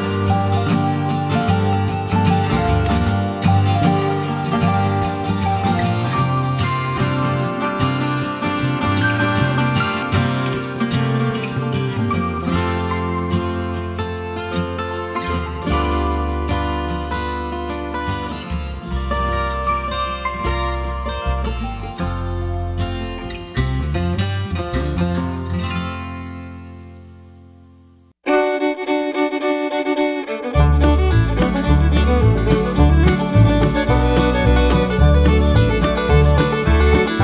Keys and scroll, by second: 27.9 Delete, 28.3 3, 29.0 0.